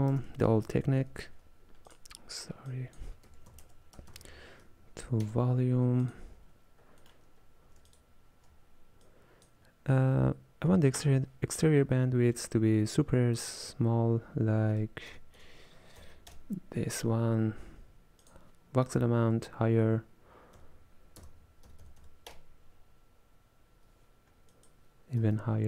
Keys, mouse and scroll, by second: 2.8 drag, 6.9 scroll up 1, 7.1-8.4 middle drag, 8.4 alt+shift+click, 9.1 click, 11.0-14.2 drag, 15.5 KP_0, 18.2-21.4 drag, 24.6-25.6 drag.